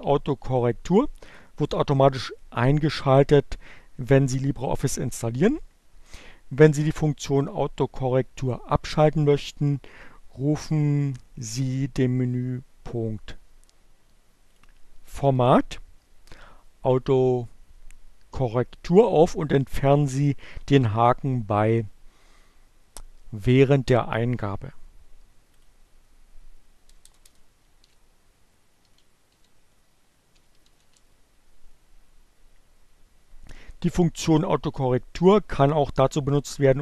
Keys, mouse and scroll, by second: 14.1 click, 24.6 click, 25.5 Return, 27.2-30.7 typing.